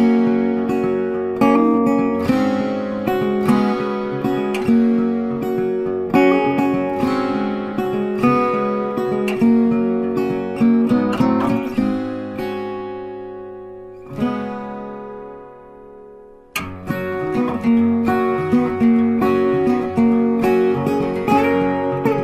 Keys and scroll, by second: 8.5 ctrl+c, 8.7 ctrl+f, 15.7 ctrl+c, 15.9 ctrl+f, 17.7 ctrl+c, 17.8 ctrl+f.